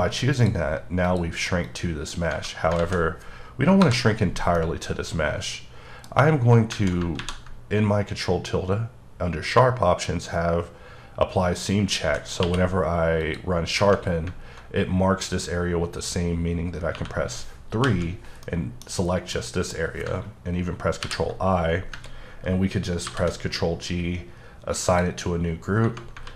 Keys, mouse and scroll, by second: 0.3 click, 1.1 click, 1.6 click, 2.8 alt+z, 3.8 KP_Divide, 4.4 scroll up 1, 4.5 middle click, 6.1-6.7 scroll up 1, 12.4 q, 13.2 click, 16.9 3, 17.8 l, 18.3 scroll up 1, 18.4 middle click, 19.3 middle click, 23.0 ctrl+g, 24.8 click, 25.5-25.8 scroll down 1.